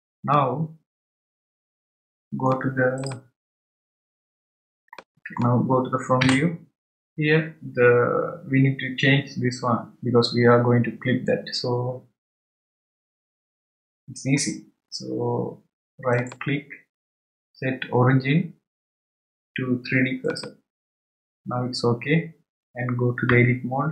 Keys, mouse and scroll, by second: 0.3-3.0 middle drag, 3.0 click, 4.9-7.2 middle drag, 16.1-23.3 right drag.